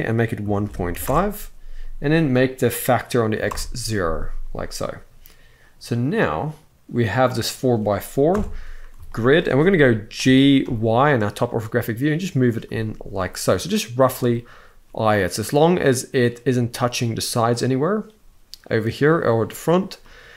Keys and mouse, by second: 2.0-3.2 drag, 6.0 click, 7.0 click, 8.0 KP_7, 8.8 shift+middle drag, 9.9 g, 10.3 y, 19.8-20.3 middle drag.